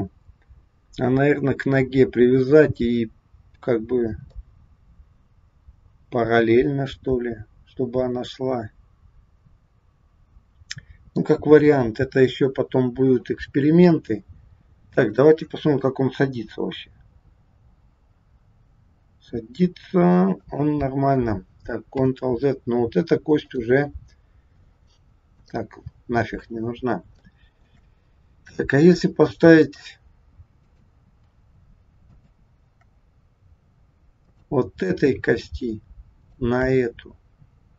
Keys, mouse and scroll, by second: 4.4 middle click, 11.5 KP_1, 12.3-12.7 scroll down 2, 15.0 click, 16.1 g, 22.1 ctrl+z, 23.4 click, 25.3 click, 26.4 scroll up 2, 27.3 shift+middle click, 28.9 click, 29.7 click, 30.6 click, 32.0 shift+click, 32.3 shift+click, 34.1 click, 36.2 shift+click.